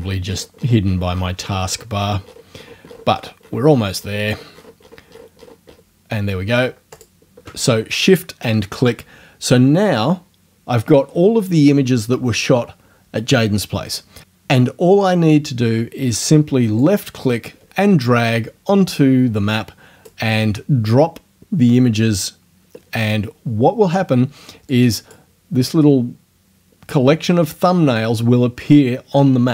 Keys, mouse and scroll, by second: 4.6-5.0 shift+scroll up 2, 7.0 shift+click, 16.8-20.2 drag, 24.7 click.